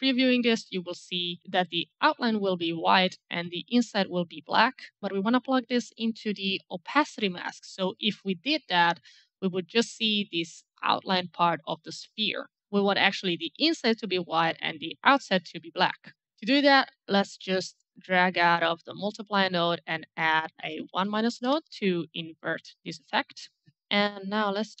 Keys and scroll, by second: 19.4-20.6 typing, 21.8 Return, 23.8 alt+Escape.